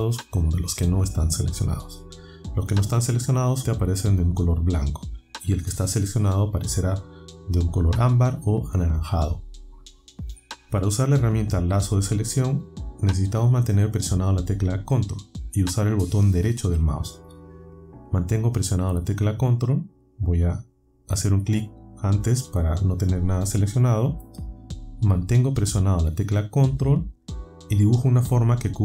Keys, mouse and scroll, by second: 21.1 click, 28.2-28.8 ctrl+right drag.